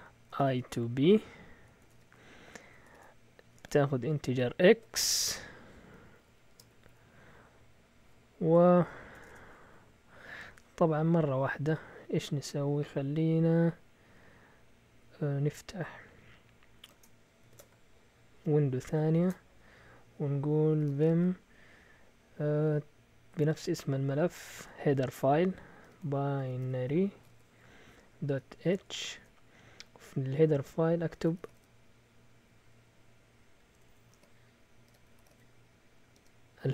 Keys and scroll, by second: 0.0-6.5 typing, 6.7 Right, 6.8 Right, 8.6-12.1 typing, 17.4 ctrl+shift+(, 19.2 ctrl+shift+t, 20.5-21.5 typing, 23.3-29.6 typing, 30.9-32.0 typing, 33.7 Escape, 33.8 Escape, 33.9-36.7 typing.